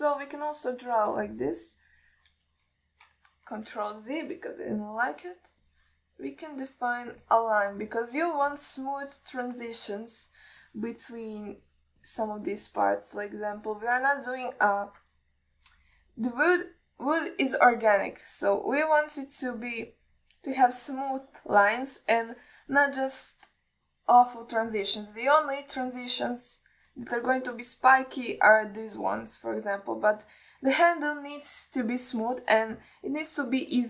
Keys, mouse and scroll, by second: 1.8 alt+middle click, 2.5 click, 3.1 drag, 3.8 ctrl+z, 6.4 middle click, 6.9 click, 7.7 click, 8.5-9.5 alt+middle drag, 9.8 click, 10.4 click, 11.0 alt+middle click, 11.9 click, 12.5 click, 12.9 click, 13.3 alt+middle click, 13.9 click, 14.4 click, 14.9 click, 15.6-16.1 middle drag, 16.8 KP_1, 20.0-21.2 drag, 22.1-24.6 shift+drag, 33.4 click.